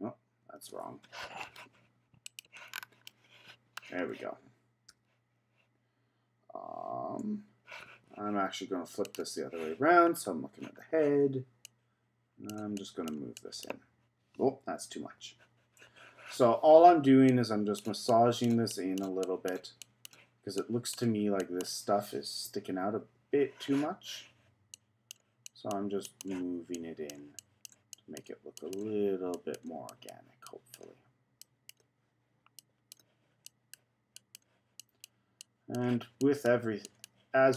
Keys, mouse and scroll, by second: 0.6 shift+KP_3, 2.2 click, 2.7-3.1 scroll down 4, 3.1 middle click, 3.9-4.9 scroll up 2, 4.9 KP_3, 9.1 click, 10.0-11.6 scroll up 5, 11.6-14.7 drag, 15.6 z, 17.3-22.4 drag, 23.7 z, 24.7-37.5 drag.